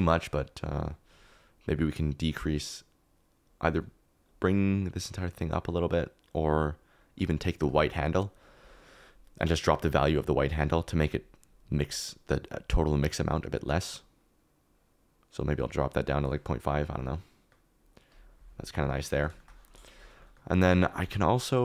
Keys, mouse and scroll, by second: 17.1 middle click, 17.3 click, 17.7 middle click, 18.1 click, 18.8 click, 19.3 shift+middle click, 20.6 click, 21.0 g, 21.4 click.